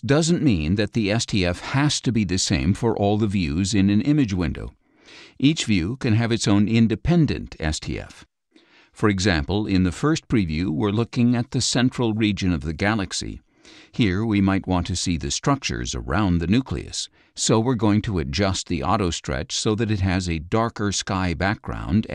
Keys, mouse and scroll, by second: 1.4 scroll up 1, 1.4 click, 2.6 click, 3.7 scroll up 1, 3.8 click, 7.0 scroll up 1, 7.1 click, 18.1 ctrl+click, 20.1-21.7 drag.